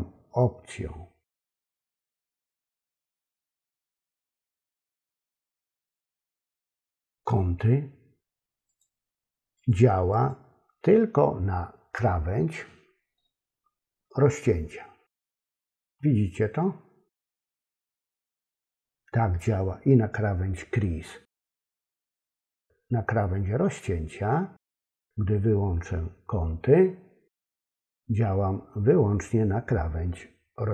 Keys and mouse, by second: 1.6 click, 2.4 click, 2.9 click, 8.7 click, 9.6 click, 10.1 click, 18.1 click, 27.7 click.